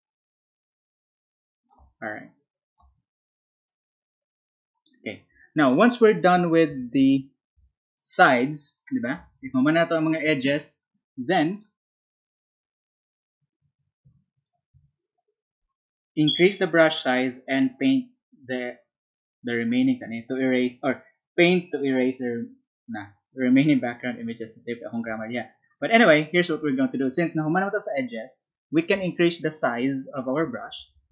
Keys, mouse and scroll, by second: 4.1 click, 9.2 alt+Tab, 12.8 Down, 14.3 click, 25.2 alt+Tab, 27.3 alt+Tab.